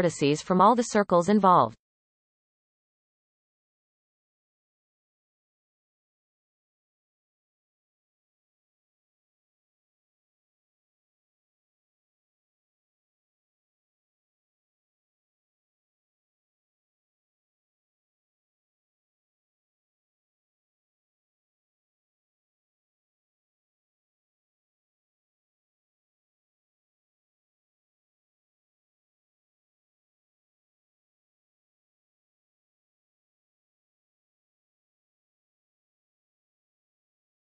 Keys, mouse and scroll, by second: 2.0 click, 3.2-5.0 ctrl+KP_Add, 6.7-7.1 shift+middle drag, 7.1-8.0 scroll up 10, 8.3 ctrl+KP_Add, 8.8 ctrl+KP_Add, 9.1 ctrl+KP_Add, 9.7 x, 10.5-11.3 scroll down 5, 11.3-12.2 shift+middle drag, 12.2 click, 12.6-13.3 scroll up 2, 13.3 ctrl+KP_Add, 13.4-14.0 ctrl+KP_Add, 14.2 ctrl+KP_Add, 14.3 ctrl+KP_Add, 14.8 ctrl+KP_Add, 15.2 x, 15.7-17.2 scroll down 7, 17.2-20.0 shift+middle drag, 20.0 click, 20.6-22.3 ctrl+KP_Add, 23.1 ctrl+KP_Add, 23.4 ctrl+KP_Add, 24.3 shift+middle click, 24.7-25.1 scroll up 1, 25.3 ctrl+KP_Add, 25.6 ctrl+KP_Add, 25.8 ctrl+KP_Add, 26.1 x, 26.8-27.3 scroll down 1, 27.3-27.8 shift+middle drag, 27.8-28.4 scroll up 1, 28.4 click, 28.8 ctrl+KP_Add, 29.0 ctrl+KP_Add, 29.4 x, 31.2 click, 32.0 shift+middle click, 32.4-33.3 scroll up 2, 33.3 ctrl+KP_Add, 33.6 ctrl+KP_Add, 33.7-35.8 ctrl+KP_Add, 36.0 ctrl+KP_Add, 36.5 ctrl+KP_Add, 36.7 ctrl+KP_Add, 36.8 ctrl+KP_Add, 37.1 ctrl+KP_Add.